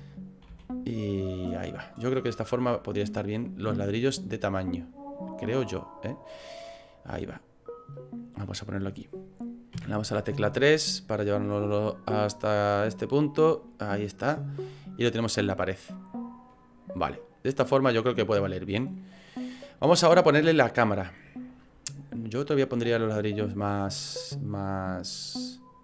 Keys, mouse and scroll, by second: 0.6 s, 2.4 click, 3.5 click, 6.2 click, 8.1 click, 9.7 KP_3, 10.4 scroll down 5, 11.4 click, 13.6 middle click, 14.2 scroll up 4, 14.8 middle click, 16.0 middle click, 16.5 scroll up 3, 17.2 right click, 17.9-18.3 scroll down 5, 19.1 middle click, 19.8 scroll down 2, 20.4 middle click, 22.2 scroll up 4, 22.7 middle click, 23.1 right click.